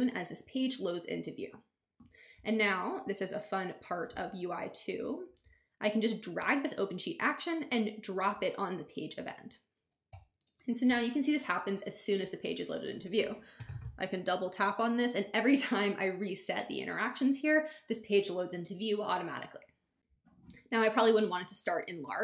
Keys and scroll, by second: 10.1 BackSpace.